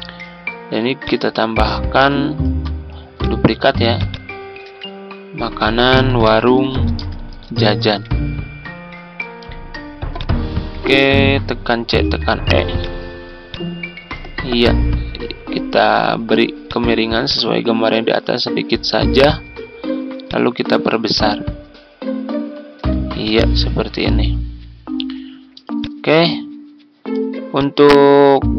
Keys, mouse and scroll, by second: 2.4 ctrl+d, 3.1 click, 4.6 ctrl+a, 5.7-8.3 typing, 10.1 click, 10.8 shift+click, 11.6 typing, 14.0 ctrl+scroll up 1, 16.6-22.8 drag, 23.1 click, 24.9 F4, 25.7 click, 27.1 z, 27.5-28.5 drag.